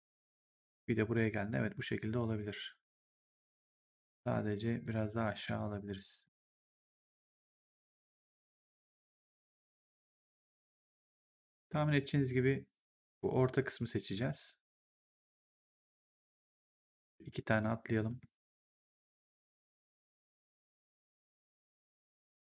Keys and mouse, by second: 4.1 right click, 4.7 click, 6.1 click, 12.2 right click, 14.0 click, 17.9 click, 19.3 shift+click.